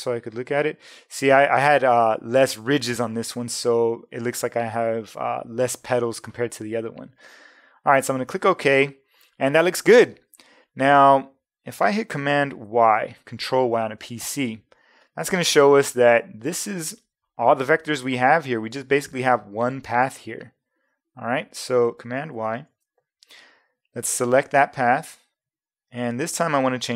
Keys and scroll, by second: 12.6 super+y, 22.6 super+y.